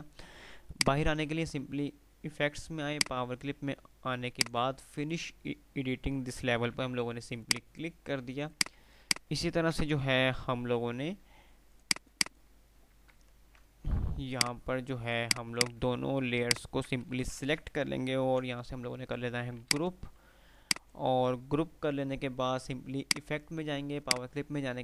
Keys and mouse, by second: 4.7 click, 6.8 F3, 7.7 click, 11.5 click, 13.3 ctrl+z, 14.4 alt+click, 16.5 shift+click, 16.9-17.8 typing, 19.7 click, 20.5 F2, 20.7 click, 21.0 F2, 23.1 click.